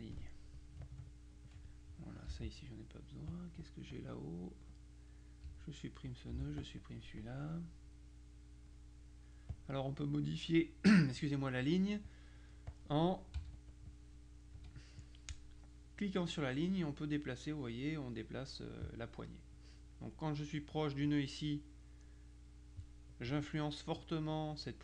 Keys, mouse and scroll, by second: 0.9 ctrl+click, 1.6 click, 2.4 Delete, 3.4 click, 4.8 click, 5.5 Delete, 6.1 click, 6.4 Delete, 7.3 click, 7.9 click, 9.6 click, 12.1 click, 13.4 z, 13.6 click, 14.6 F2, 15.1 click, 16.4-19.0 drag, 19.6 click, 21.5-23.3 drag.